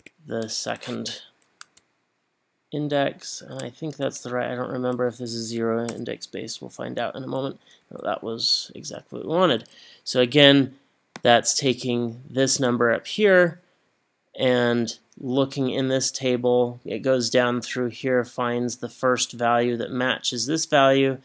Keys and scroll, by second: 0.0 2, 7.8 Up.